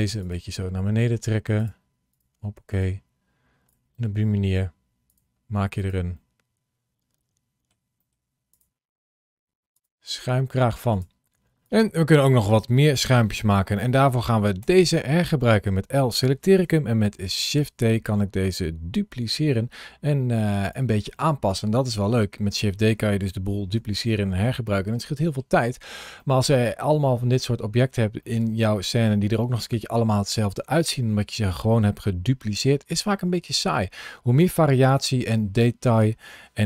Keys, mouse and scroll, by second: 14.5 l, 17.2 shift+d, 21.0 middle click, 23.4 scroll up 1, 26.0 middle click, 26.7 middle click, 27.3 middle click, 31.8 middle click, 34.2 click, 34.8 click.